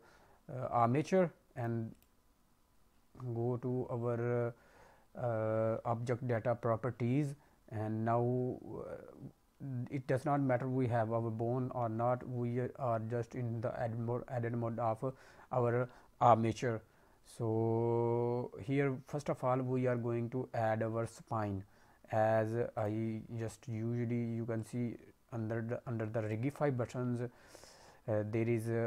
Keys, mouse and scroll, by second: 1.9 click, 2.5-4.9 scroll down 4, 22.7 click, 24.5 click, 26.1 click, 26.7-28.3 scroll down 5, 28.3-28.8 scroll down 3.